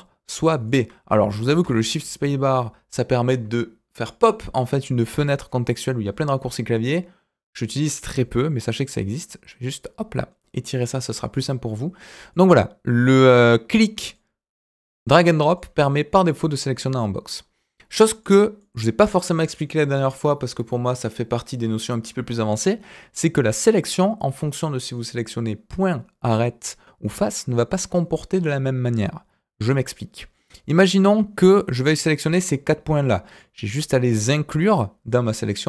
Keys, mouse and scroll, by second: 0.6 click, 1.4 shift+space, 9.1-10.8 drag, 12.3-14.1 drag, 15.0 click, 17.2-17.5 scroll up 1, 17.5-18.1 scroll down 1, 18.1 click, 18.5-20.0 middle drag, 29.6-30.3 scroll up 2, 30.3-31.4 middle drag, 33.3-35.6 drag.